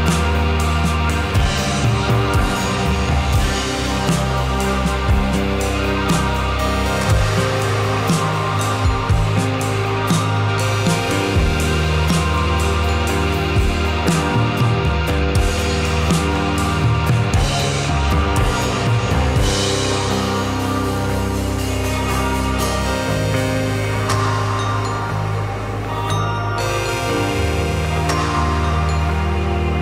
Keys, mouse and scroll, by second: 0.9 KP_0, 1.9 click, 5.6 ctrl+s, 6.7-8.1 drag, 9.8 click, 15.7 click.